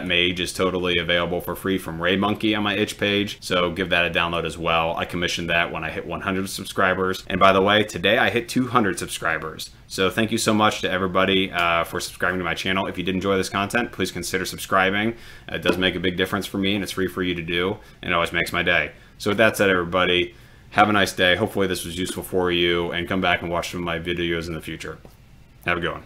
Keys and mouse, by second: 4.2 click.